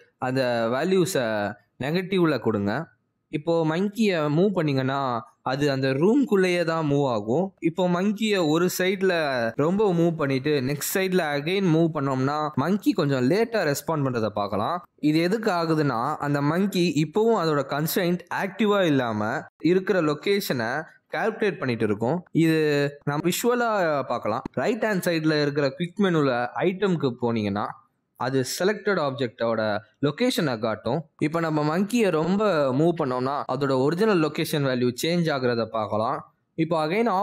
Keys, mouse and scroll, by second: 0.4 ctrl+v, 1.4 ctrl+v, 2.9 click, 4.3 ctrl+c, 4.7 ctrl+v, 5.1 ctrl+v, 5.5 middle click, 7.0-7.8 scroll down 2, 7.2 middle click, 7.9 g, 10.1 middle click, 10.9 g, 12.7 middle click, 13.4 g, 14.8 middle click, 15.4 g, 17.8 middle click, 19.7 g, 25.1 middle click, 26.6 click, 28.0 click, 32.8 shift+middle click, 33.4 middle click, 33.9 g.